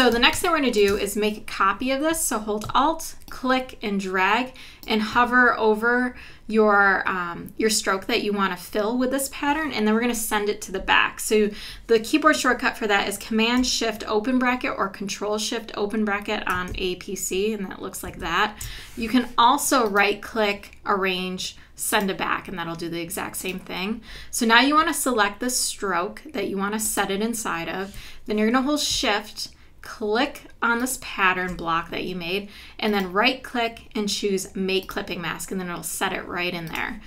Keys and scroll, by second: 0.3 space, 18.1 shift+super+[.